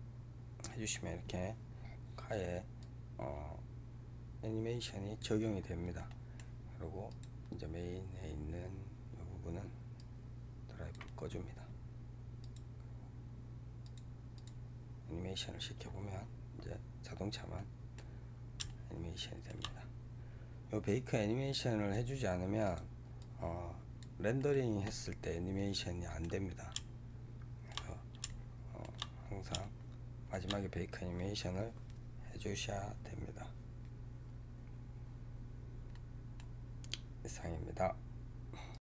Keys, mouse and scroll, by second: 5.5-6.0 scroll down 3, 6.0-7.0 middle drag, 7.0-15.7 drag, 15.8-17.5 scroll down 10, 17.5-19.7 middle drag, 19.7-20.2 scroll up 7, 21.6-24.3 drag, 24.3-25.0 middle drag, 25.0 scroll down 3, 25.4-29.1 middle drag, 29.1-29.5 scroll up 3, 29.5-32.5 shift+middle drag, 35.8-38.8 middle drag.